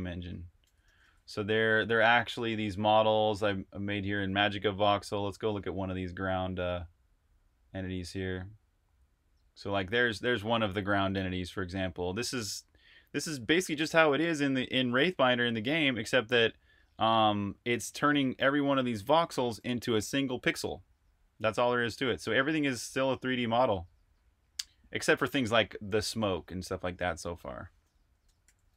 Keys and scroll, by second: 0.6 super+q, 1.3-2.0 typing, 23.6 super+Tab, 28.0 Escape, 28.2-28.7 typing.